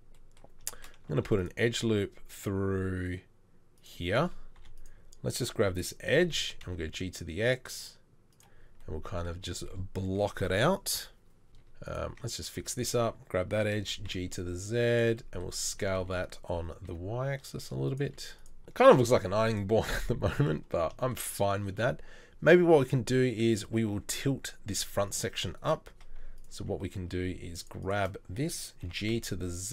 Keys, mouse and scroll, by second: 1.1 ctrl+r, 4.6 2, 6.1 g, 11.5 Tab, 12.1 Tab, 13.8 g, 15.7 s, 18.1 z, 20.0 Tab, 24.9 ctrl+r, 28.8 g.